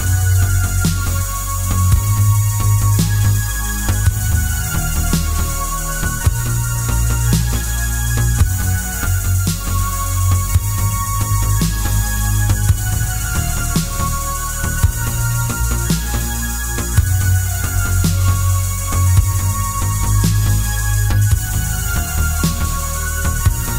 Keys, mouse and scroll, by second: 1.9 click, 3.3 ctrl+r, 6.0 click, 6.4 ctrl+r, 9.1 click, 9.5 ctrl+r, 11.0 click, 12.1 3, 12.3 click, 13.5 e, 15.5 click, 16.0-17.6 middle drag, 17.9 scroll down 1, 18.2 middle click, 18.9-21.8 middle drag, 21.6 Tab, 21.8 click.